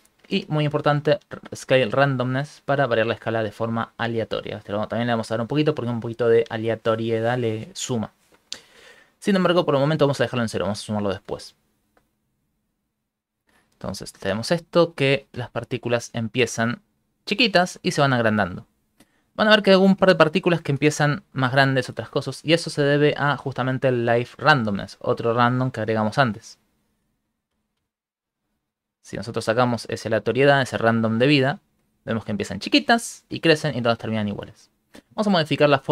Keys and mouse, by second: 1.1 click, 4.5 click, 9.6 click, 13.1 click, 13.7 click, 14.3 shift+space, 15.3 Right, 19.6 shift+middle click, 20.1 ctrl+middle click, 20.5 shift+middle click, 21.0 ctrl+middle click, 24.2 click, 26.4 Left, 26.8 Right, 27.2 Right, 27.5 Right, 27.8 Right, 28.8 click, 29.7 click, 30.5 click, 31.6 ctrl+middle click, 32.0 shift+middle click.